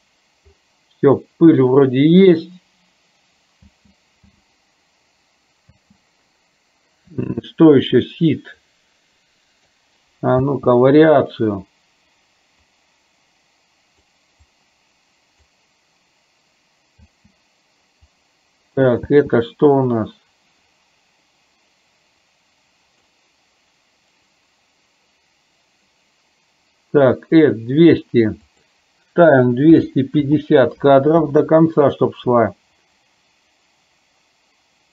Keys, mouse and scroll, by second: 3.7 space, 4.3 space, 5.8 space, 8.6-9.7 drag, 10.5 space, 12.9-14.3 drag, 14.6-15.8 drag, 17.1 space, 18.2 click, 19.4 space, 22.5 click, 28.6-31.4 drag.